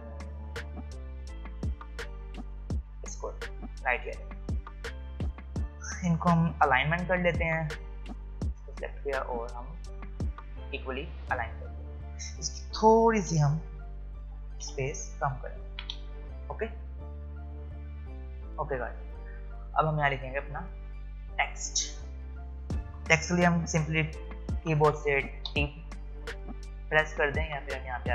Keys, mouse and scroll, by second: 3.8-4.3 alt+scroll up 1, 5.2 click, 14.2 Up, 16.4 click, 18.7-19.3 alt+scroll up 1, 25.5 t.